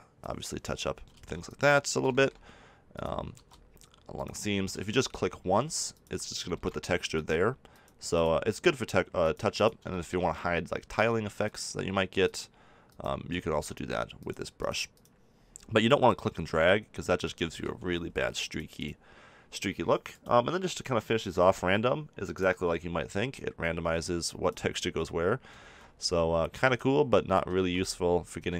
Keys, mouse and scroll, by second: 1.1 ctrl+z, 1.6-6.6 drag, 3.3 ctrl+z, 15.2-17.6 drag, 17.6 ctrl+z, 18.4-21.9 drag, 23.3-25.2 drag, 25.6 ctrl+z, 26.7-28.1 drag, 27.5 ctrl+z.